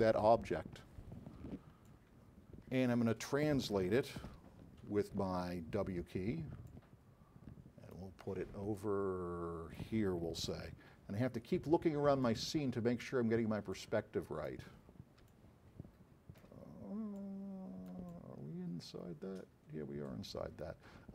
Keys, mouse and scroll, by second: 2.0-3.9 alt+drag, 4.3 r, 5.2 w, 6.7-8.3 drag, 8.9-10.1 drag, 10.6-11.6 alt+drag.